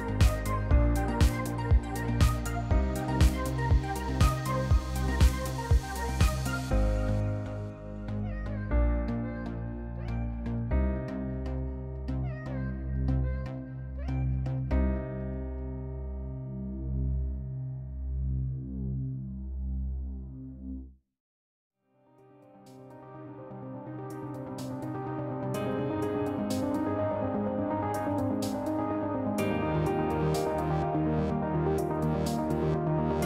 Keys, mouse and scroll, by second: 1.2 b, 4.2 click, 6.0 click, 7.8 click, 8.6 Return, 10.3 click, 11.4 click, 11.7 3, 11.9 Return, 12.9 F2, 14.8 click, 17.4 click, 18.8 click, 19.4 click, 20.7 b, 22.3 click, 23.6 click, 24.2 Return, 25.7 click, 26.3 3, 26.4 Return, 27.6 F2, 29.4 click, 30.8 click.